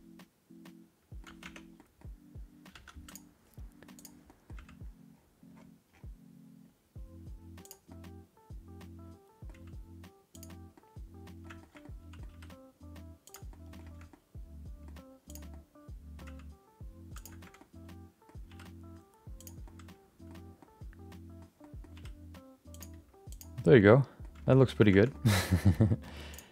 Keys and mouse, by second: 1.4 Tab, 1.7 middle click, 2.7 3, 3.0 click, 3.9 click, 4.3 middle click, 4.5 g, 7.9-9.5 middle drag, 9.5 g, 10.7 middle click, 11.6 shift+middle click, 11.8 middle click, 12.3 r, 13.5 middle click, 14.1 middle click, 15.2 click, 15.5 middle click, 16.2 g, 17.5 middle click, 18.5 r, 19.6 middle click, 20.5 middle click, 21.6 middle click, 21.9 r, 22.9 g, 23.6 middle click, 24.4 shift+middle click, 24.6 middle click, 24.9 shift+middle click, 25.1 middle click, 25.6 middle click, 26.3 click.